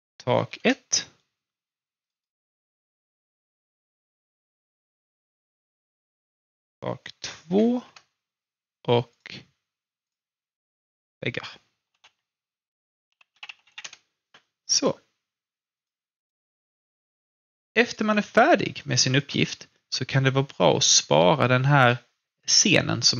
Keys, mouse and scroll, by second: 0.0-0.9 typing, 2.0 click, 4.1 ctrl+c, 4.5 click, 6.3 ctrl+v, 7.5 typing, 7.8 Return, 9.1 click, 11.9 shift+v, 13.1-14.2 typing, 14.7 click, 16.5-17.0 scroll down 1, 17.1 alt+middle click, 17.7 alt+click, 18.1 alt+scroll down 1, 18.6 alt+middle click, 19.1 alt+click, 19.5 alt+middle click.